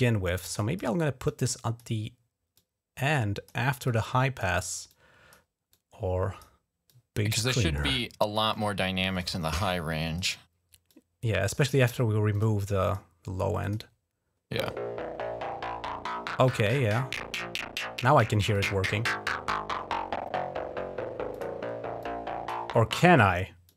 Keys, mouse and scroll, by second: 0.3 click, 0.6 right click, 1.1 click, 1.6 right click, 2.4 click, 3.6 click, 4.7 click, 5.5 click, 6.7 click, 8.3 click, 9.5 click, 10.7 click, 12.1 click, 12.6 click, 13.4 click, 18.3 click, 21.1 click, 21.8 click, 23.4 click.